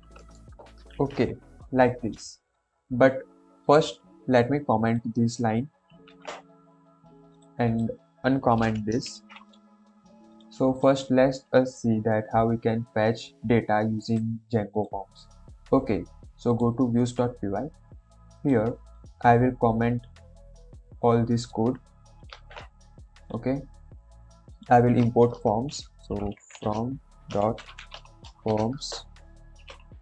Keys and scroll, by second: 0.8 shift+', 1.2 ctrl+s, 6.0 ctrl+/, 9.0 ctrl+s, 22.3 ctrl+/, 25.4 Return, 25.8-30.0 typing.